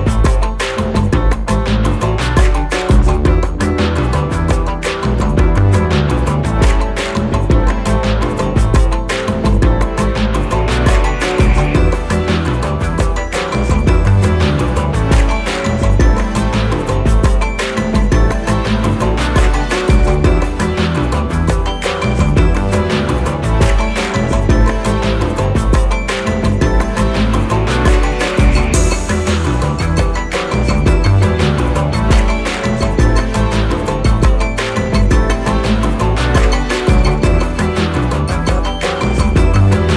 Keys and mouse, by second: 2.1-2.7 click, 4.6 click, 8.3 click, 8.3 click, 11.4 click, 13.3 Down, 14.6 click, 16.6 click, 17.6 right click, 18.7 click, 21.6-25.1 drag, 35.6-36.6 alt+drag.